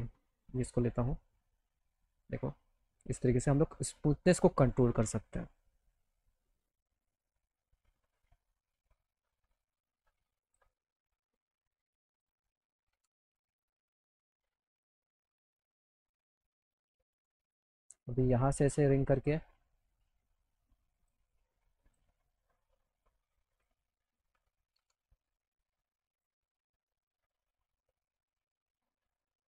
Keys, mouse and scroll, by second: 0.5-2.1 drag, 10.2 click, 12.2 click, 13.0 ctrl+z, 14.8 click, 17.4 click, 19.1 click, 20.9 click, 21.8 click, 23.5 click, 26.2 click, 26.8 alt+middle click.